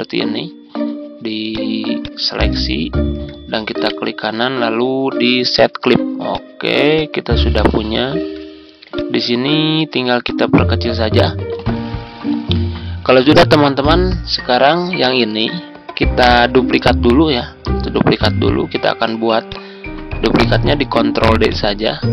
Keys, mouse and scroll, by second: 2.6-3.0 ctrl+scroll down 1, 3.8 right click, 5.5 click, 6.9 click, 7.8-8.2 ctrl+scroll up 1, 8.8 ctrl+click, 10.2 click, 17.9 ctrl+d, 19.4-22.1 drag.